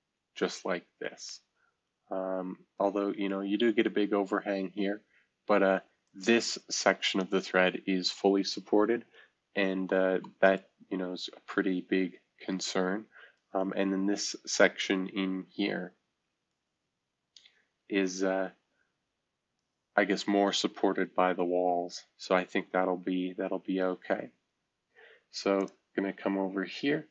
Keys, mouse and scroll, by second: 5.7 F2, 6.0-8.7 drag, 9.4 shift+F2, 10.5-14.5 middle drag, 14.5-16.4 scroll up 1, 16.4-25.6 middle drag, 25.6-27.1 drag.